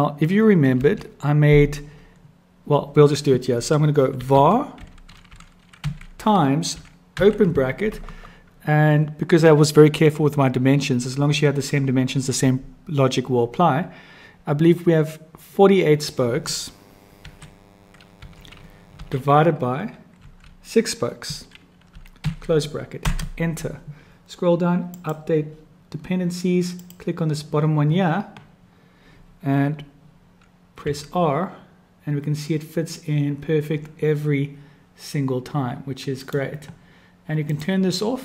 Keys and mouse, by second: 22.5-24.1 drag, 24.9 click, 26.8 click, 30.9 r, 37.4 click.